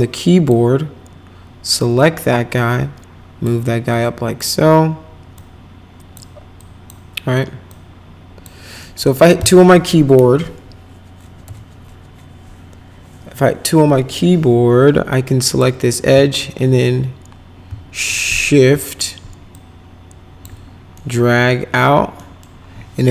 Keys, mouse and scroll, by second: 0.0 click, 1.8-3.4 drag, 3.9 click, 5.4 click, 6.6 click, 7.7 click, 8.8 middle click, 11.4 2, 15.4 click, 16.1 z, 17.6 z, 19.5 shift+click, 20.9 middle click, 22.1 middle click.